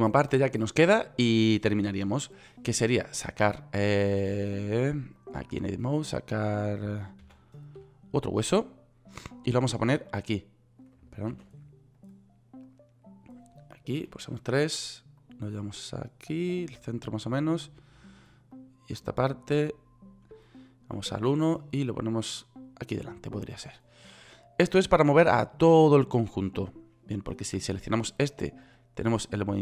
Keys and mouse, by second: 4.8 click, 7.8 shift+a, 11.8 ctrl+z, 14.6 KP_3, 18.2 click, 21.5 KP_1.